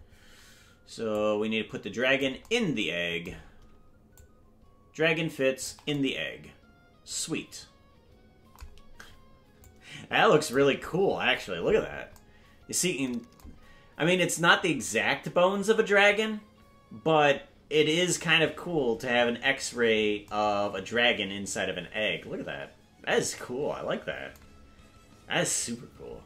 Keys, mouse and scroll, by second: 1.1-2.2 drag, 4.1-5.7 shift+drag, 9.6 click.